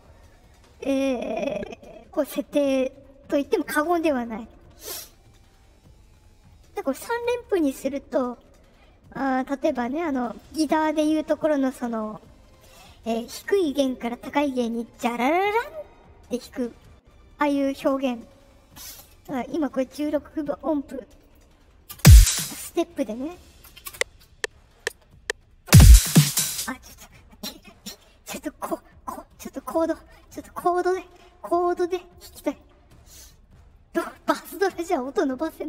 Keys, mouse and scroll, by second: 2.1 click, 3.7 click, 10.2 click, 19.9 click, 21.1 click, 21.8 space, 22.2 space, 23.8 space, 26.4 space, 32.1 click, 32.2 click, 32.8-34.6 right drag, 35.5 click.